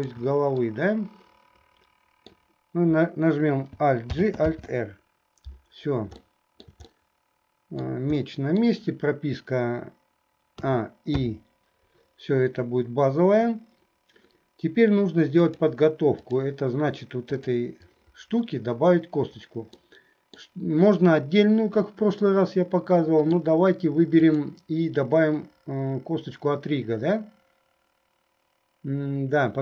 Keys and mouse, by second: 0.1 shift+click, 0.9-2.4 middle drag, 4.2 alt+g, 4.8 alt+r, 6.3 shift+middle click, 7.0-8.1 middle drag, 8.4 middle click, 10.8 a, 11.5 i, 15.5-16.6 drag, 17.4 click, 20.0 middle click, 22.3-23.6 middle drag, 24.3 click.